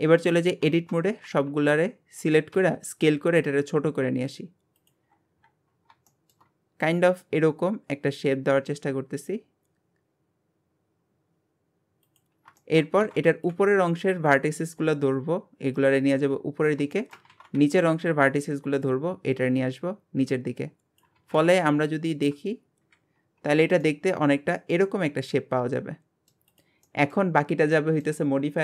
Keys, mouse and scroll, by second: 0.6 Tab, 5.1-5.5 scroll up 10, 6.1 shift+middle click, 6.5 scroll up 2, 6.9 s, 12.6 shift+middle click, 13.0 alt+a, 13.3 b, 15.8 click, 16.9 shift+middle click, 17.3 alt+a, 17.6 b, 19.6 click, 21.2 alt+z, 22.8 KP_Divide, 23.2 Tab, 23.8-26.5 middle drag, 26.5 click, 26.9-27.3 middle drag, 27.3 scroll down 1, 27.7-28.5 middle drag, 28.5-28.6 scroll up 1.